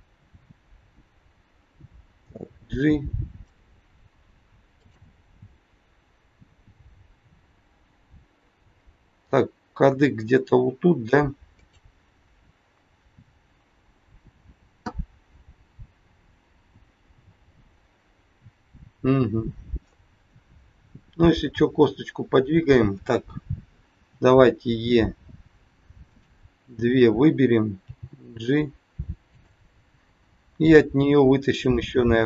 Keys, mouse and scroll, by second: 2.1 g, 4.8 click, 6.7 g, 19.9-20.3 scroll up 2, 23.9 e, 26.9 click, 27.8 g, 31.9 e.